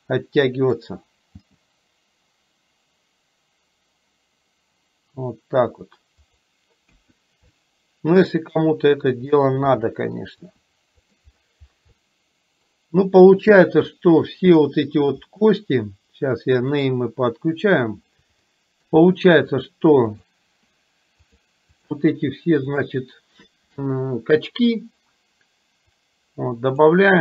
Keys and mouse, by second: 1.4 g, 6.9 KP_1, 8.7 r, 9.8 middle click, 10.5 r, 12.0 middle click, 14.0-15.3 drag, 18.5 shift+middle click, 19.7 click, 20.2 click, 21.3 click, 22.9 click, 26.0 click.